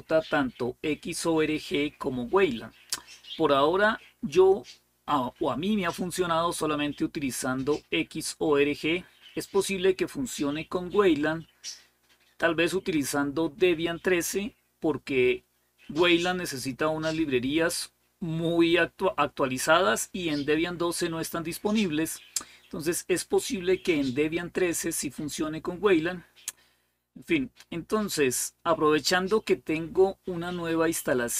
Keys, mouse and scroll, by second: 6.3-7.2 typing, 7.3 Return, 10.7-12.3 drag, 13.5 click, 16.9 super+Return, 18.5 super+Return, 21.2-22.4 typing, 23.5 super+w, 24.3 super+w, 26.2 super+w.